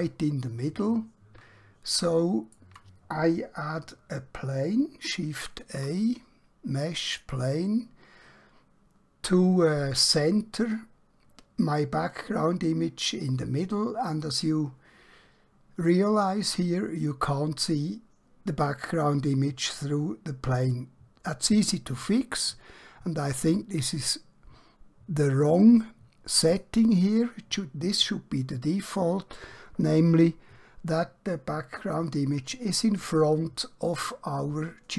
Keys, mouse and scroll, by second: 5.8 a, 7.1 click, 20.6 click, 26.5 click.